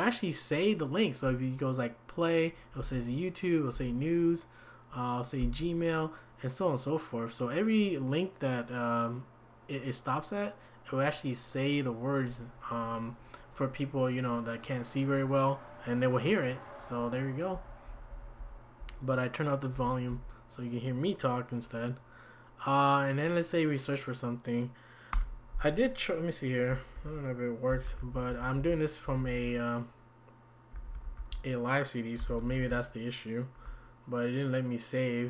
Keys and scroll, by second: 2.8 Down, 17.5 Down, 19.7 Down, 20.1 Down, 25.1 Return, 27.0-29.1 typing, 30.9-33.1 typing.